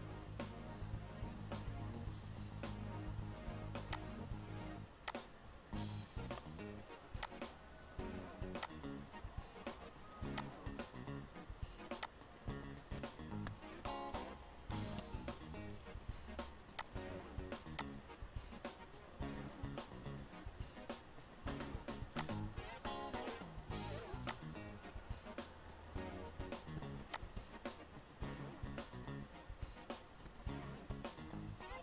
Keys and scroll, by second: 14.7 ctrl+g, 30.4 t, 31.4 l.